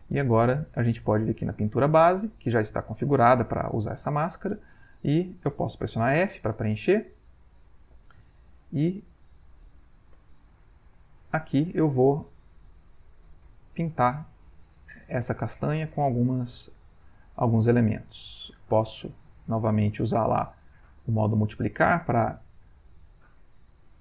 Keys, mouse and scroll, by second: 6.2 f, 10.2 b, 11.5-13.3 shift+drag, 13.4 shift+click, 14.0-15.1 drag, 16.5-17.5 ctrl+drag, 19.6 click, 21.1 click, 22.2 ctrl+click, 22.8-24.0 shift+drag.